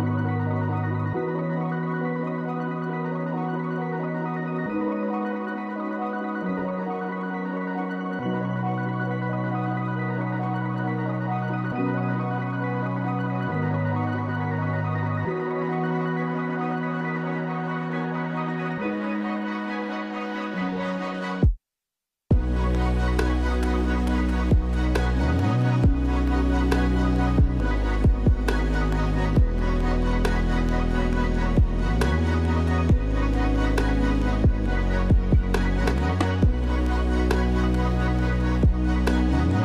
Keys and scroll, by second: 4.7 space, 13.3 space, 14.9 space, 18.3 space, 22.3 space, 22.5 ctrl+z, 33.4 space, 38.2 space, 38.6 ctrl+z.